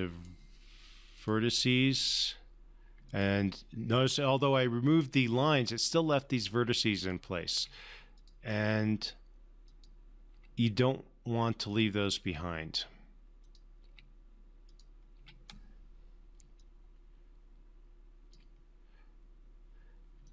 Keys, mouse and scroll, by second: 1.6 click, 7.3 click, 7.9 Delete, 8.5 click, 9.0 Delete, 10.0 click, 10.7 Delete, 12.0 click, 12.6 Delete, 13.7 click, 14.2 Delete, 15.0 click, 15.5 Delete, 16.9-18.8 alt+drag.